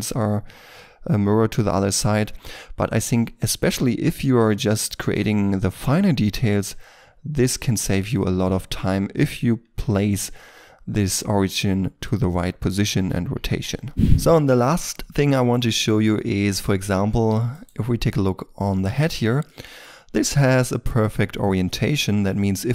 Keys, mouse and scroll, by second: 0.0 double click, 1.9 middle click, 16.9-17.5 scroll up 1, 17.5 right click, 19.0-19.4 scroll up 1, 19.4 shift+middle click, 19.8 shift+middle click, 21.6 middle click, 22.4-22.7 scroll up 1.